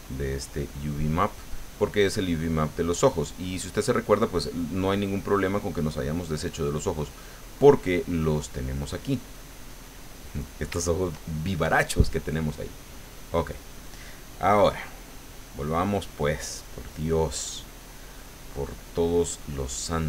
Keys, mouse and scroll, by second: 5.6 click, 6.3 click, 8.4 click, 10.0 middle click, 13.1 click, 16.4 click, 18.7 click.